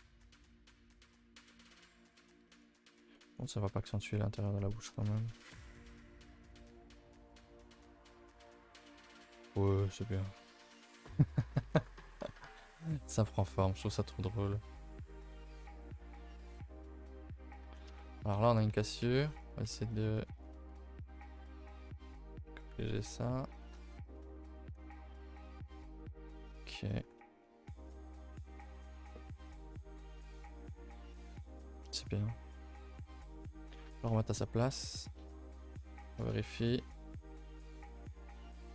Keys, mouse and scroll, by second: 0.0-0.7 scroll down 7, 0.7-1.8 shift+middle drag, 1.8-2.5 scroll up 4, 2.5 middle drag, 2.8 click, 3.0 Tab, 3.1 middle click, 3.3-3.7 scroll up 4, 3.7 a, 3.8 a, 4.4 click, 4.7 shift+middle click, 4.8-6.0 scroll up 9, 5.1 a, 5.2 a, 6.0 ctrl+r, 7.3 click, 7.5 Tab, 7.8 a, 7.9 a, 8.0-8.3 scroll down 7, 8.3-9.5 middle drag, 9.5 KP_0, 10.3-10.7 scroll down 4, 10.7-11.2 shift+middle drag, 11.2 a, 11.4 a, 11.7 ctrl+s, 12.8-13.4 scroll up 2, 13.4-14.4 shift+middle drag, 14.4 click, 14.6 g, 16.3 click, 17.4 click, 17.7 Tab, 18.0 shift+middle click, 18.2 scroll up 1, 18.2 scroll, 22.1 click, 25.0 scroll down 3, 25.3-25.7 shift+middle drag, 25.7 scroll down 2, 26.0-26.5 shift+middle drag, 26.5-26.9 scroll up 2, 26.9 click, 27.0 g, 33.9 g, 35.8 z, 36.4 shift+middle drag, 36.6 scroll up 2.